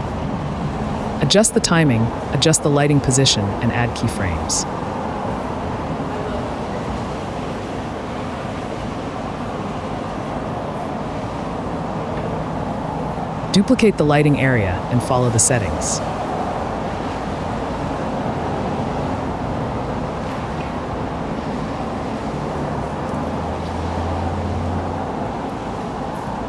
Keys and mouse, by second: 0.4 click, 2.1 click, 3.4-5.3 drag, 5.7 click, 9.2 g, 9.3 x, 11.3 click, 15.7 shift+d, 16.7 drag, 18.0 click, 19.5 click, 21.5-22.9 drag, 25.9 click, 26.2 click.